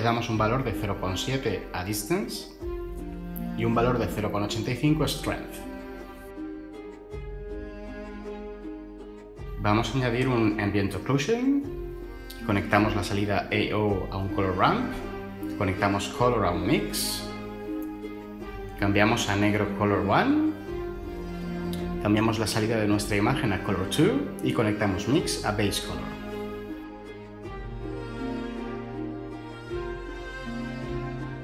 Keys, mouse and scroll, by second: 1.2 7, 1.6 Return, 4.8 8, 5.0 5, 5.2 Return, 10.1 ctrl+shift+a, 12.9-14.2 typing, 16.6-17.8 typing.